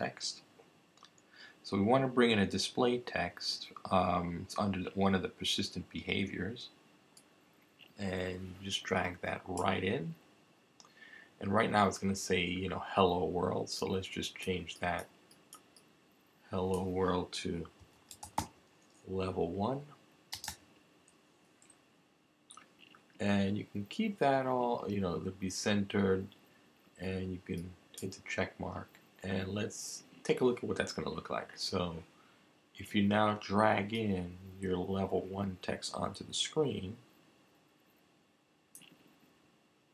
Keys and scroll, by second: 17.5-20.5 typing, 21.9 typing.